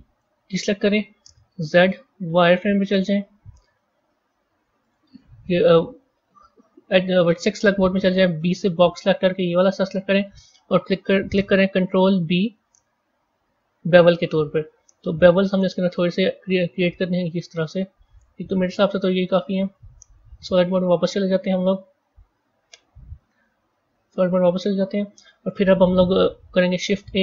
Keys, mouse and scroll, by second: 0.0 a, 1.5 z, 4.8 click, 8.3 b, 12.0 ctrl+b, 18.8-20.0 drag, 20.0 z, 20.9 z, 23.4 z, 26.3 shift+a.